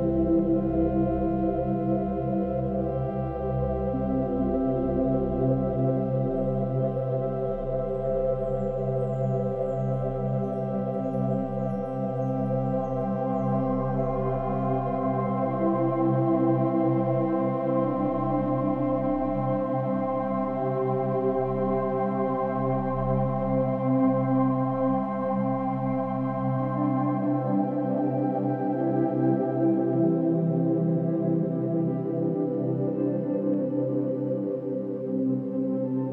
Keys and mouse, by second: 0.1 Right, 0.2 Right, 0.5 Right, 1.8 i, 2.3 click, 3.9 click, 5.8 -, 7.3 click, 9.7 s, 11.4 click, 12.8 i, 13.2 click, 14.4 click, 15.5-17.5 typing, 17.0 Return, 18.0 click, 18.8 space, 19.8 space, 22.8 click, 23.0 click, 24.4 click, 25.1 click, 25.3 shift+click, 26.0 shift+click, 29.1-29.6 ctrl+alt+drag, 30.1 click, 30.8 shift+click, 31.7 click, 32.4 shift+click, 32.8 shift+click, 33.5 shift+click, 33.8 shift+click, 34.1 shift+click, 34.4 shift+click.